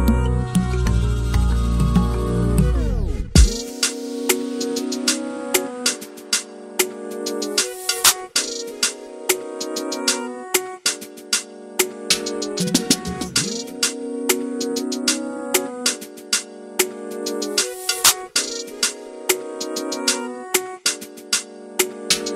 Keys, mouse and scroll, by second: 0.1 scroll down 1, 0.3 /, 0.5-1.5 scroll up 2, 1.5 ctrl+Tab, 1.6 alt+a, 1.7 shift+middle click, 1.8 scroll up 1, 2.0 click, 2.0 middle click, 2.3 scroll up 1, 2.4 middle click, 2.8-3.3 scroll down 2, 3.0 shift+middle click, 3.3 middle click, 3.4 scroll up 1, 3.7 scroll down 1, 3.8 Tab, 4.1 a, 4.4 shift+n, 4.6 Tab, 4.8 alt+a, 4.9 scroll up 2, 5.0 middle click, 5.2 click, 5.4 scroll down 1, 6.3 click, 6.9-7.3 scroll down 4, 7.0 shift+middle click, 7.3 scroll up 6, 7.4 middle drag, 7.7 scroll down 1, 7.8-9.0 shift+middle drag, 9.0-9.9 scroll down 3, 9.6 shift+middle drag, 9.9 shift+middle click, 10.0 scroll up 5, 10.2 middle drag, 10.3 scroll down 1, 10.4 shift+middle click, 10.5-11.0 scroll up 3, 10.6 middle click, 11.0 click, 11.1 shift+click, 11.2 shift+click, 11.4 shift+click, 11.5 scroll down 2, 11.6 shift+middle click, 11.8 shift+middle click, 12.0 shift+middle click, 12.2-12.6 scroll up 7, 12.4 shift+middle drag, 12.6-13.2 middle drag, 13.2 scroll down 7, 13.4 scroll up 2, 13.6-14.0 middle drag, 14.1 middle click, 14.3 click, 15.5 click, 16.4 scroll up 3, 16.5 middle click, 17.0 scroll down 1, 17.1-18.9 middle drag, 18.9 click, 19.2-20.2 middle drag, 21.0 scroll down 2, 21.1 shift+middle click, 21.3-21.6 scroll up 12, 21.6 middle click, 21.9 shift+middle click, 22.0 scroll down 5, 22.2 shift+middle click.